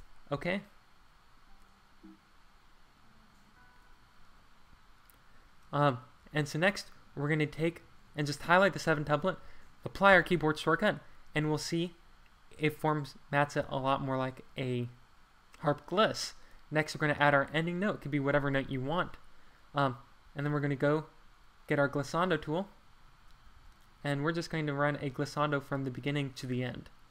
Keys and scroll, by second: 6.2 Escape, 10.1 shift+super+1, 20.4 ctrl+q, 23.5 super+z, 25.4 Escape.